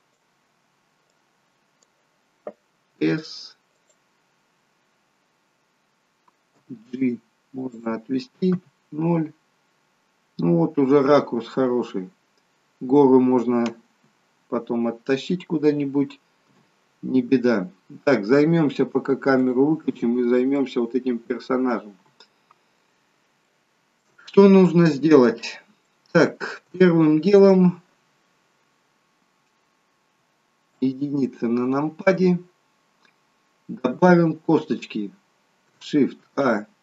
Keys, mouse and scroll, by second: 1.3 click, 2.8 s, 6.7 g, 8.6 KP_0, 10.1-10.5 scroll up 4, 10.9-11.4 scroll down 1, 16.5 KP_0, 17.7 scroll up 4, 19.4 click, 20.3 scroll up 2, 20.7 middle click, 21.6-22.2 scroll down 8, 22.3 middle click, 23.6 shift+middle click, 24.2-24.7 scroll up 5, 24.8 middle click, 26.3 scroll up 2, 26.9 shift+middle click, 29.0-29.6 scroll down 2, 30.8 KP_1, 32.7 scroll up 2, 36.3 shift+a.